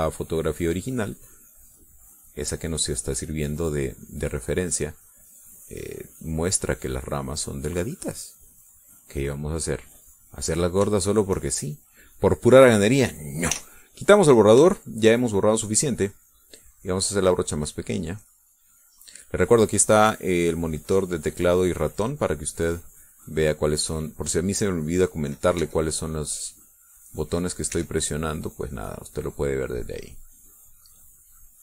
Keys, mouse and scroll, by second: 0.9-4.3 drag, 5.2 click, 5.8-8.8 drag, 9.0 middle click, 9.8-11.3 drag, 11.7 shift+middle click, 11.8 shift+click, 13.2 click, 13.7 click, 14.4 e, 14.9 middle click, 14.9 click, 16.8 shift+click, 17.7 shift+click, 18.5-20.2 shift+drag, 21.1-22.5 drag, 23.9-25.1 drag, 25.4 click, 26.5 e, 26.6-28.7 drag, 28.6 e, 29.1-30.6 drag, 30.7 click.